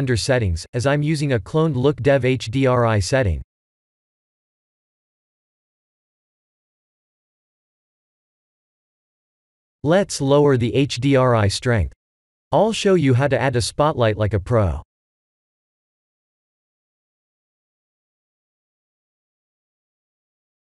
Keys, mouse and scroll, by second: 1.4 click, 2.4 middle click, 6.1 middle click, 8.8 click, 10.4 KP_0, 18.3 shift+a.